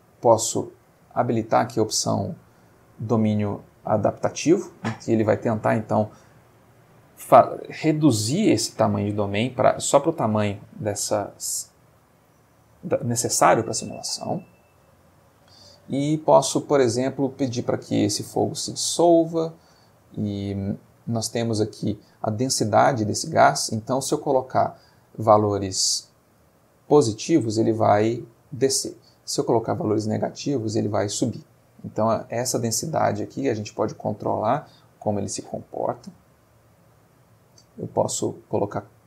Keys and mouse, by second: 0.9 click, 5.4-6.1 middle drag, 8.9-9.5 middle drag, 10.8-11.4 shift+middle drag, 11.6 shift+middle click, 14.4-16.4 middle drag, 16.5 middle click, 17.8 click, 20.7-21.3 middle drag, 35.6-37.4 middle drag, 37.9 click, 38.9-39.0 drag.